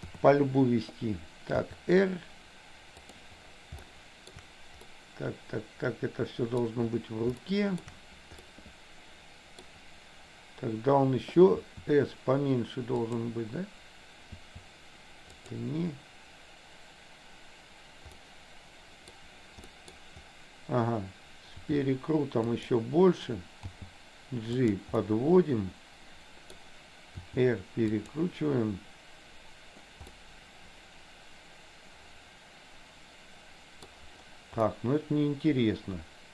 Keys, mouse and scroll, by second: 0.2 KP_7, 1.6 r, 3.8 shift+middle click, 4.9-6.7 middle drag, 7.4 shift+middle click, 8.5-9.8 middle drag, 11.7 s, 14.5 s, 18.3-19.3 middle drag, 19.8 middle click, 21.7 r, 23.8 g, 25.1-26.7 middle drag, 27.2 r, 30.2-34.0 middle drag, 34.7-36.3 middle drag.